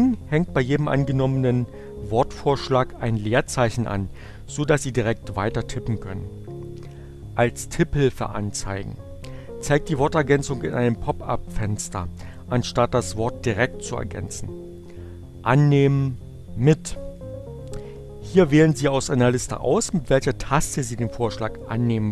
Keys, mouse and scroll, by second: 15.9 click.